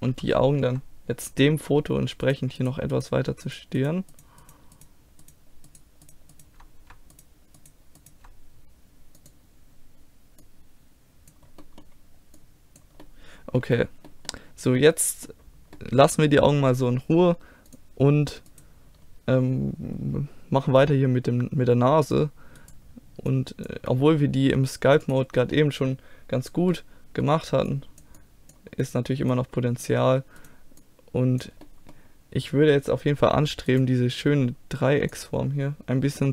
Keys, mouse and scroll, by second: 0.1 a, 2.2-10.4 right drag, 9.2-14.2 drag, 11.6-13.6 middle drag, 14.2 middle click, 17.7-19.0 drag, 18.5 right click, 19.0-20.8 middle drag, 20.8-22.6 drag, 22.6 right click, 22.7 click, 23.4 click, 23.4 right click, 23.9 middle click, 24.4 click, 26.6 middle click, 27.1-28.5 middle drag, 28.5-31.4 drag, 28.8-31.4 right drag, 31.6 click, 31.6 middle click, 31.6 right click, 32.3-34.1 drag, 35.5 click.